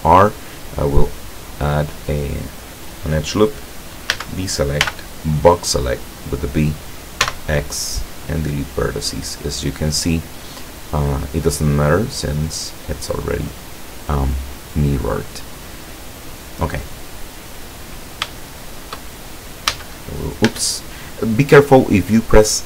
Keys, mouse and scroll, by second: 1.0 click, 1.5 click, 4.3 a, 5.0 b, 5.5-6.6 drag, 7.3 x, 8.5 click, 9.3-11.9 middle drag, 18.4 shift+middle click, 18.9 shift+middle click, 19.8 a, 20.6 a.